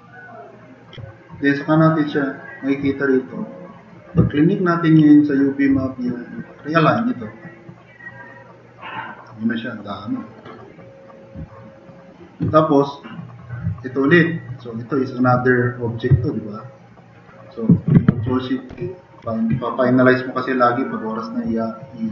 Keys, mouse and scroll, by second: 3.2 middle click, 18.8 ctrl+shift+e.